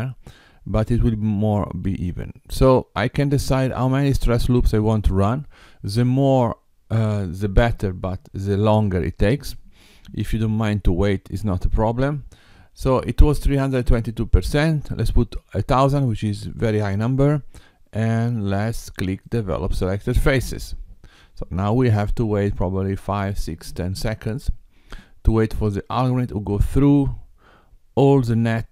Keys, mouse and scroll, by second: 18.8 click.